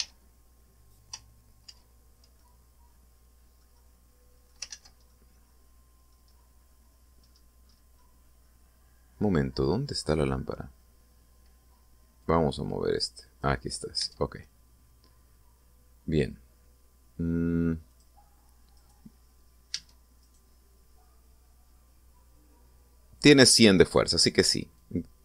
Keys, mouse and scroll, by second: 0.7 w, 2.4 ctrl+z, 3.1-4.4 ctrl+middle drag, 4.5 middle click, 5.4 ctrl+z, 5.8-6.9 ctrl+middle drag, 7.0-7.6 scroll down 4, 7.9-8.6 scroll up 4, 8.7-10.5 middle drag, 10.7-11.1 scroll down 2, 12.9-14.3 drag, 14.7 Tab, 18.6 click, 19.5 right click, 20.5 Tab, 20.9 right click, 24.6 right click.